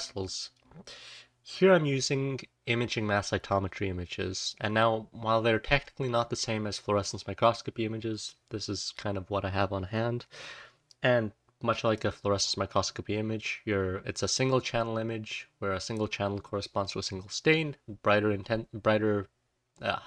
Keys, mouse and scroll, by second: 11.1-11.6 scroll up 1, 12.0-12.7 drag, 13.6-14.5 scroll up 1.